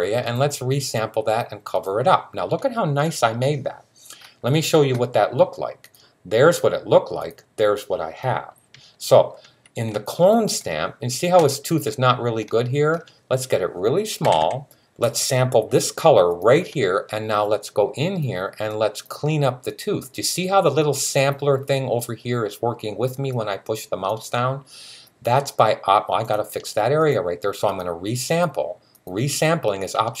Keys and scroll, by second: 14.0 [, 14.2 [.